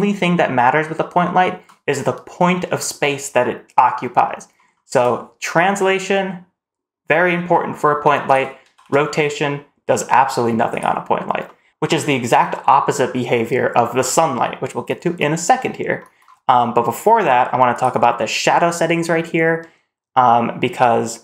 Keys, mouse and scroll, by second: 1.1-1.5 middle drag, 4.1-4.5 middle drag, 4.8 g, 8.5 r, 11.3-11.6 middle drag, 17.6 click.